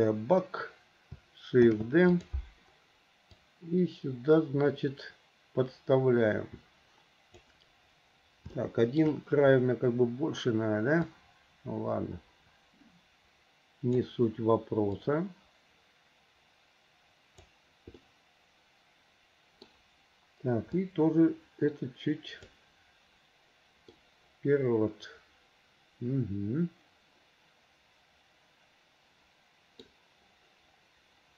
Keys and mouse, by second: 1.8 shift+d, 3.6-7.5 drag, 8.7 shift+middle click, 11.4-14.1 drag, 15.2-17.6 drag, 18.1-19.8 middle drag, 21.0-24.1 drag, 24.1-29.5 middle drag, 29.5 click, 29.5 right click.